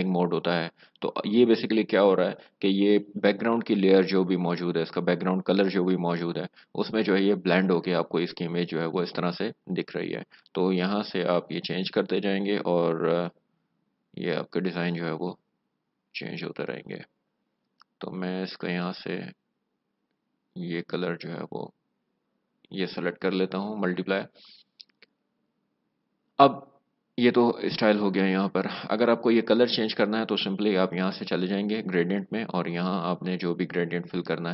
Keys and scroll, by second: 9.9 Down, 10.6 Down, 10.9 Down, 11.2 Down, 11.4 Down, 11.8 Down, 12.0 Down, 12.3 Down, 12.5 Down, 12.8 Down, 13.0 Down, 13.3 Down, 13.6 Down, 13.8 Down, 14.1 Down, 14.3 Down, 14.5 Down, 14.8 Down, 15.1 Down, 15.3 Down, 15.5 Down, 15.8 Down, 15.9 Down, 16.4 Down, 16.6 Down, 17.5-17.9 Up, 18.6 Up, 18.6 Up, 18.8 Up, 19.2 Up, 19.3 Up, 19.8 Up, 20.0 Up, 20.3 Up, 20.9 Up, 21.1 Up, 21.4 Up, 21.5 Down, 21.8 Down, 21.9 Down, 22.1 Down, 22.5 Up.